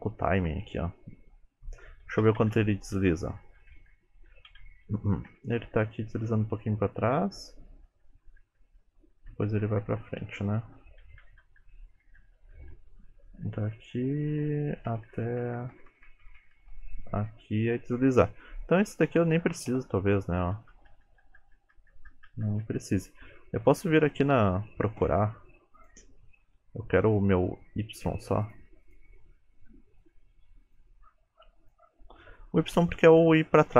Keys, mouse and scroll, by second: 0.8 space, 2.3-3.9 Left, 4.6 Left, 5.4-8.3 Right, 8.5 Right, 8.7 Right, 8.9 Right, 9.0-9.5 Right, 9.7 Right, 9.9 Right, 10.1-10.9 Left, 11.1 Left, 11.3 Left, 11.5 Left, 11.7-12.5 Left, 12.6 Left, 12.8 Left, 13.0 Left, 13.2 Left, 13.3 Left, 13.5 Left, 13.7 Left, 14.1 Left, 14.4 Left, 14.8-16.6 Right, 16.8 Right, 17.1 Right, 17.4 Right, 19.1 click, 19.8 Delete, 20.6-21.8 Left, 22.0 Left, 22.2 Left, 22.9 Left, 24.0-25.1 scroll up 8, 25.8 click, 28.5 click, 28.9 click, 30.1 click, 31.7 click, 32.3 shift+middle click, 32.9 click, 33.5 click.